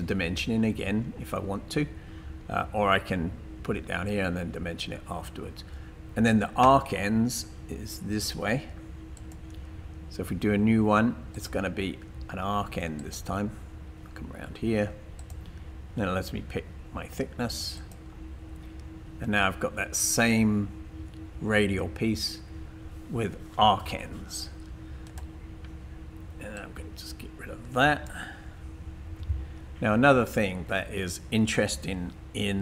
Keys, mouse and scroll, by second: 26.6 click, 29.1 Delete.